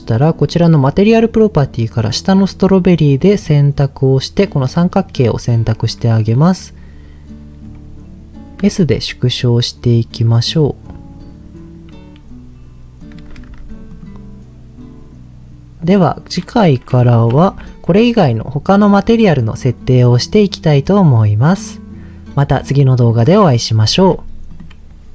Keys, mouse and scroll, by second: 3.4 click, 6.8-7.9 scroll up 1, 8.6 s, 13.0 click, 13.5 Tab, 13.9 click, 17.4 alt+h, 18.4-19.2 scroll down 4, 23.9 ctrl+s, 24.4 click.